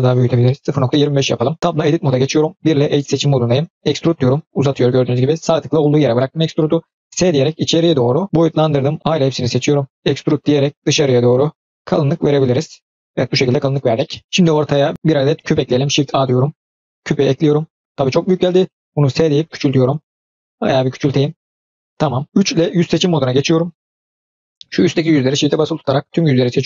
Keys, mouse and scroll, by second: 1.6 Tab, 2.5 1, 3.8 e, 7.0 s, 8.9 a, 10.0 middle click, 10.0 e, 12.4 middle click, 14.9 scroll up 2, 14.9-15.2 middle drag, 15.8 shift+a, 17.3-17.8 scroll down 3, 18.9 s, 21.9-22.2 scroll up 2, 22.2 ctrl+shift+z, 22.7 3, 24.1 click, 24.9 shift+click, 25.4-25.8 middle drag, 26.5 shift+click.